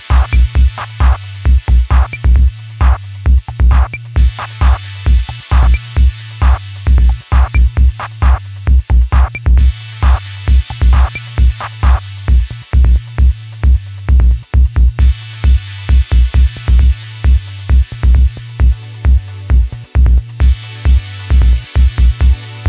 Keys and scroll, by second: 3.7 ctrl+KP_Subtract.